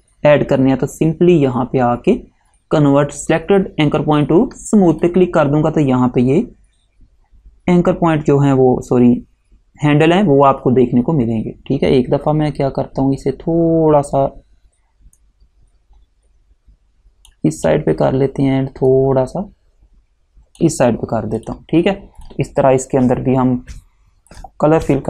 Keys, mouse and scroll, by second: 5.0 click, 15.3 click, 19.0 click, 21.5 click.